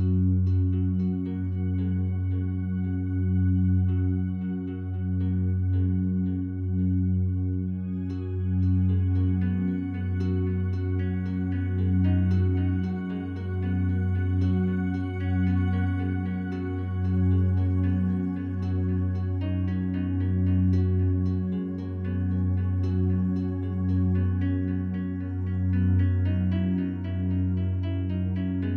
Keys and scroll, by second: 11.4 1, 11.6 Tab, 22.4-26.2 typing, 28.5-28.7 typing.